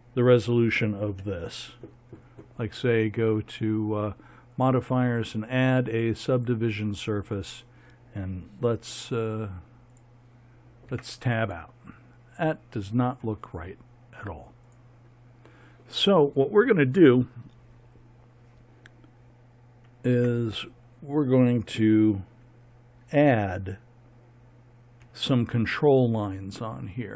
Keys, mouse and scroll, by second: 1.2 a, 10.9 Tab, 11.4-12.1 drag, 20.1 Tab, 25.0 a.